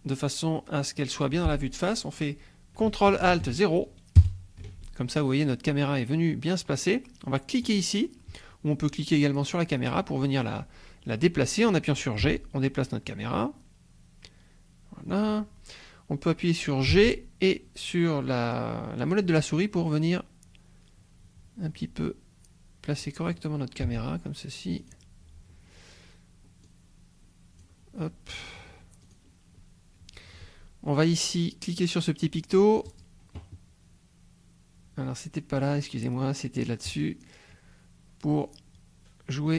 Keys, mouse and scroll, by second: 4.2 ctrl+alt+KP_0, 7.6 click, 9.5 click, 12.2 g, 15.1 click, 16.9 g, 19.2 click, 22.9 click, 23.8 g, 24.8 click, 26.7 click, 29.0 click, 32.8 click, 36.8 click, 38.4-39.5 drag.